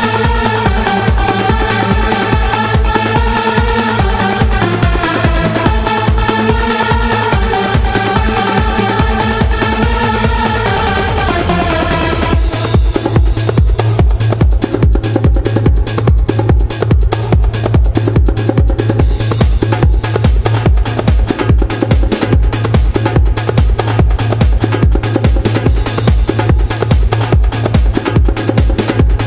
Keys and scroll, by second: 0.9 w, 4.4 q, 8.4 q.